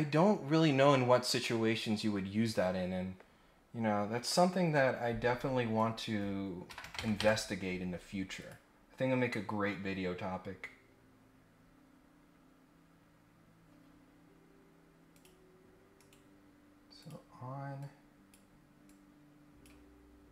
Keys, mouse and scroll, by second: 5.7 click, 8.4 click, 12.8-13.2 scroll up 1, 15.1 click, 16.0 right click, 17.0 click, 17.8 click, 18.9 click.